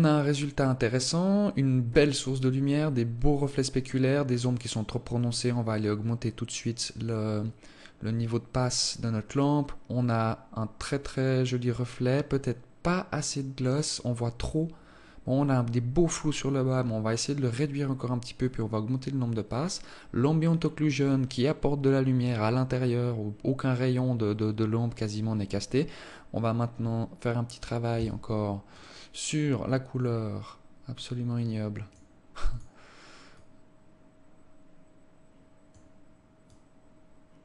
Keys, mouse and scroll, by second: 28.5 Escape, 29.3 right click, 30.1 scroll down 1, 30.2-31.2 scroll up 11, 31.5-31.9 scroll down 2, 32.4 click, 33.0 click.